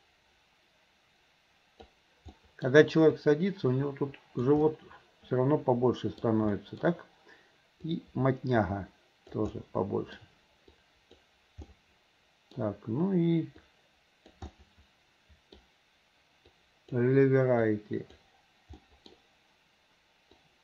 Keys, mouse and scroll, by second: 0.0-1.9 drag, 2.4 middle click, 3.2-4.5 drag, 4.7-6.2 middle drag, 6.6 middle click, 7.9-9.4 drag, 9.6 middle click, 10.8 click, 11.7 middle click, 13.7 click, 14.5-15.6 middle drag, 16.6 click, 17.7 click, 18.8 middle click, 20.4-20.6 drag.